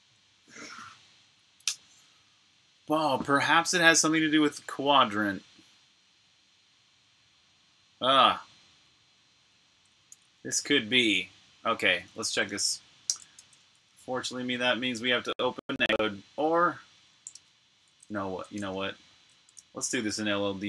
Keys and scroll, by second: 10.0 f, 12.3 super+Tab, 13.2 shift+super+Tab, 17.7 super+Tab.